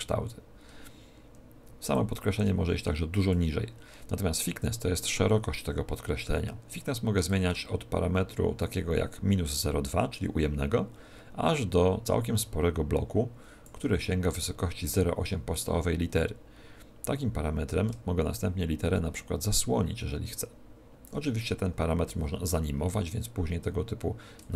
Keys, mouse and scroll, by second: 1.9 click, 7.2 click, 15.5 click, 24.3 shift+click.